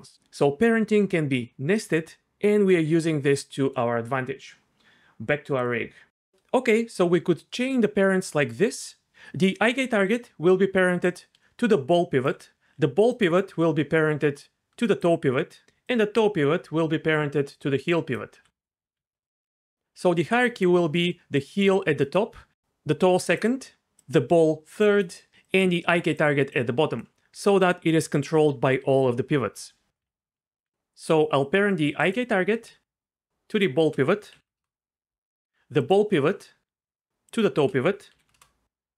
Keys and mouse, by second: 10.1-27.0 typing, 10.5 click, 13.1 click, 15.8 click, 21.4 click, 22.7 click, 24.0 click, 25.4 click, 26.5 click, 30.0-30.6 d, 30.7 ctrl+z, 32.0 click, 33.5 shift+click, 34.3 ctrl+p, 38.1 ctrl+p.